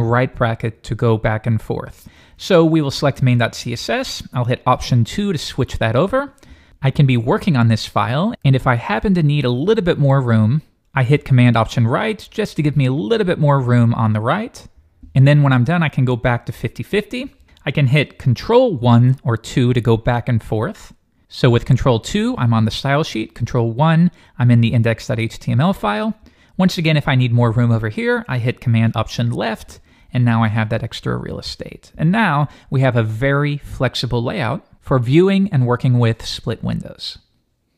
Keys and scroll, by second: 0.0 shift+super+], 0.8 shift+super+[, 1.2 shift+super+], 1.5 shift+super+[, 11.6 alt+super+Right, 16.3 alt+super+2, 18.8 ctrl+1, 19.4 ctrl+2, 20.0 ctrl+1, 22.0 ctrl+2, 23.4 ctrl+1, 29.3 alt+super+Left.